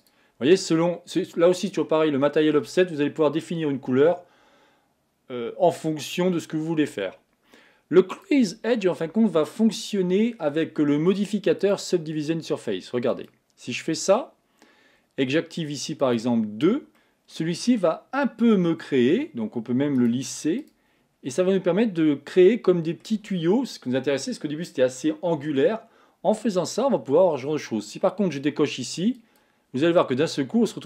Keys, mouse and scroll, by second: 0.0-3.1 drag, 8.4 click, 11.7-14.7 drag, 16.1 click, 17.0 middle click, 17.7-18.5 scroll up 4, 18.5 scroll down 1, 20.1-21.2 right drag, 21.2-21.7 scroll down 1, 21.7-24.8 middle drag, 29.5 click, 30.3-30.7 scroll up 1, 30.7-30.8 scroll down 1.